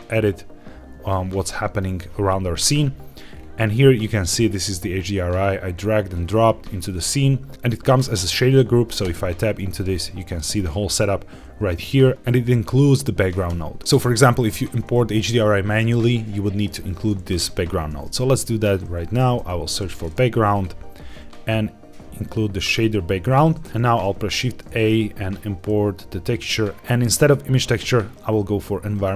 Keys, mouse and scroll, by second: 1.4 middle click, 3.1-3.7 scroll up 1, 3.7 middle click, 3.7-4.1 scroll up 2, 4.4 click, 4.7-6.2 drag, 7.5-8.9 scroll down 3, 8.9 Tab, 13.4 Tab, 17.8 shift+a, 23.7 shift+a, 25.0 shift+a.